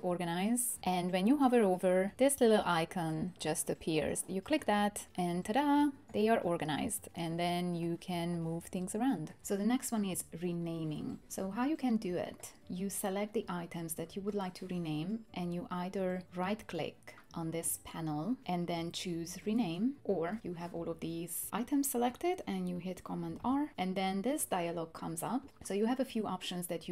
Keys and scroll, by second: 23.4 super+r.